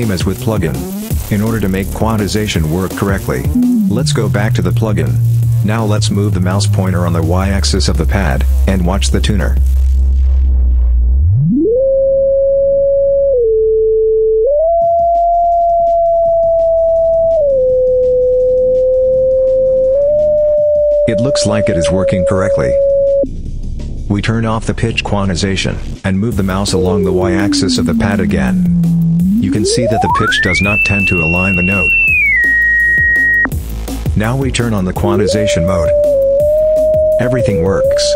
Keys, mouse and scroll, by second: 0.1-2.6 drag, 3.3-23.2 drag, 25.5 click, 26.5-33.4 drag, 34.1 click, 34.8-38.1 drag.